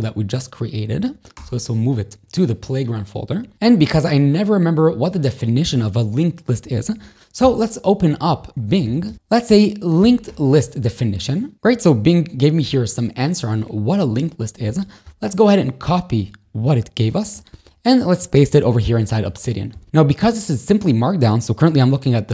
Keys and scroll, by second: 1.4 Return, 3.5 o, 3.7 Return, 7.5 ctrl+shift+j, 8.4 super+t, 8.7 b, 10.1 t, 10.3 Return, 17.3 Escape, 17.5 ctrl+shift+k, 19.1 super+v, 19.9 super+e.